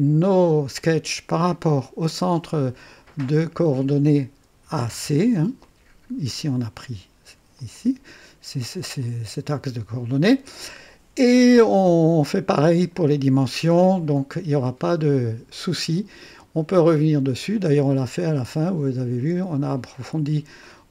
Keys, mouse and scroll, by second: 1.9-3.5 drag, 4.6 typing, 5.6-6.6 drag, 7.5-9.1 drag, 10.1-13.1 drag, 14.5-18.0 drag, 20.6-20.9 drag.